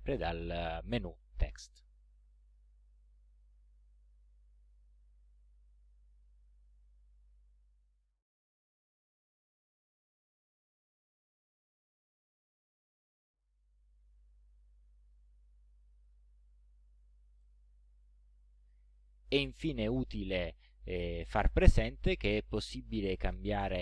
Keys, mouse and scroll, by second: 2.3 click, 3.7-4.0 ctrl+scroll down 2, 5.3-6.5 drag, 6.7-7.1 ctrl+scroll up 2, 11.2 shift+click, 16.1 click, 17.4 click.